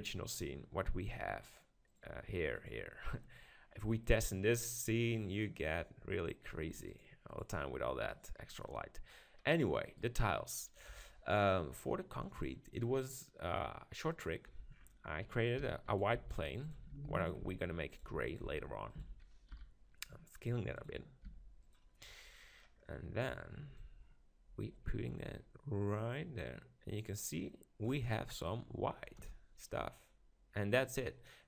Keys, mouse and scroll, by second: 1.9-4.4 drag, 4.4-7.0 middle drag, 7.0-9.2 drag, 9.2 middle click, 9.9-11.8 right drag, 10.9 KP_7, 12.7-14.6 drag, 14.7-16.0 middle drag, 15.6-19.1 typing, 16.0-17.8 drag, 18.0-20.2 drag, 20.9-23.5 drag, 21.4 g, 23.5 middle click, 23.8-25.6 drag, 28.2-30.0 middle drag, 29.2 KP_0.